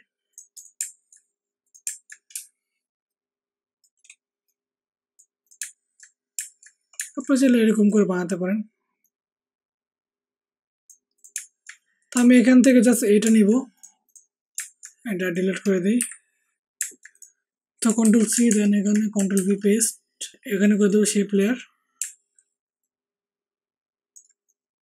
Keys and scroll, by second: 15.9 Delete, 18.0 ctrl+c, 18.4 alt+Tab, 19.1 ctrl+alt+Tab, 19.3 ctrl+alt+v.